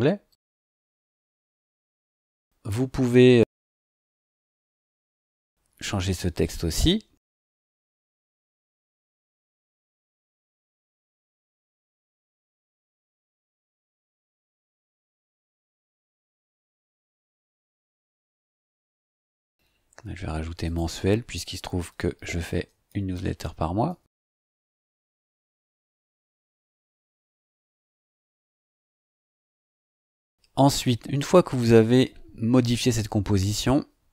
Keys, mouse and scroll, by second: 0.3 click, 2.2 click, 3.9-5.3 drag, 9.9-16.6 typing, 20.6 click, 21.3-25.8 typing.